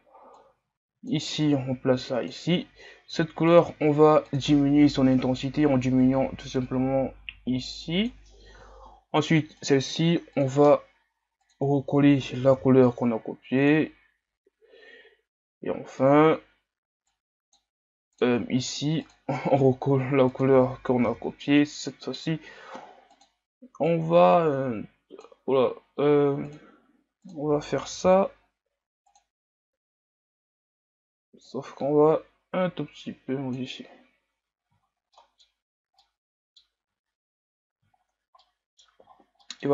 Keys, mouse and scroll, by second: 1.5-5.5 drag, 9.7-13.6 drag, 17.1-23.1 drag, 29.1 click, 34.8-36.0 scroll up 6, 35.1-35.5 middle drag, 36.0-36.8 middle drag, 36.8 a, 37.4-38.4 scroll down 7, 38.4-39.1 middle drag, 39.1-39.7 scroll up 2.